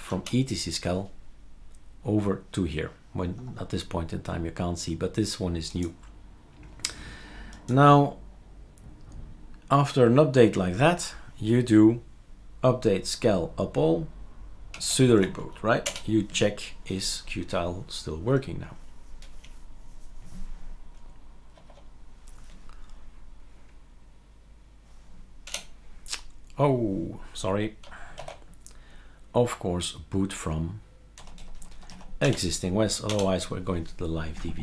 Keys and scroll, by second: 0.1 Return, 14.7-15.1 typing.